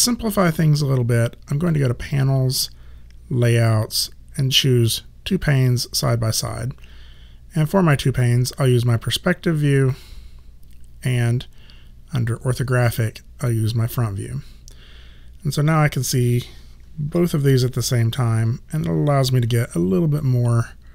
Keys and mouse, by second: 1.6 click, 5.6 click, 10.0 click, 17.1 4, 19.5 r, 20.2 click.